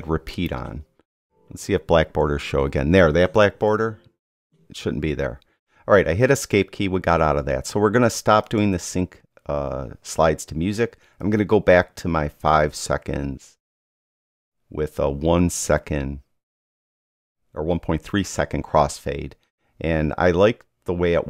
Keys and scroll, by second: 4.5 Escape.